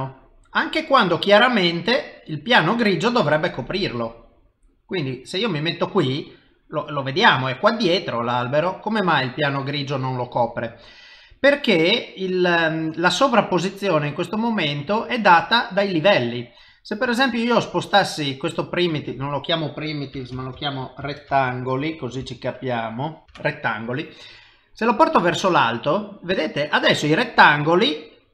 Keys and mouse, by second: 1.6 middle click, 6.6 middle click, 8.2 middle click, 9.7 middle click, 16.7 click, 18.9 click, 19.1 click, 23.2 Left, 25.0 click, 26.2 middle click, 27.5 middle click.